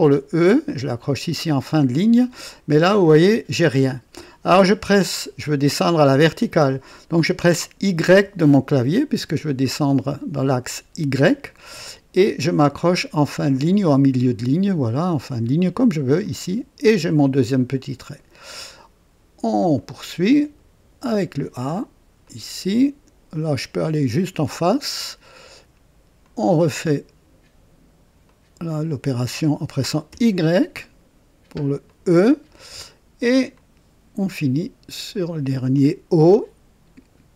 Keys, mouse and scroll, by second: 1.5 click, 8.1 y, 16.2 click, 19.7 click, 22.2 click, 24.6 click, 26.2 click, 28.2 click, 30.1 y, 31.8 click, 33.5 click, 35.7 click.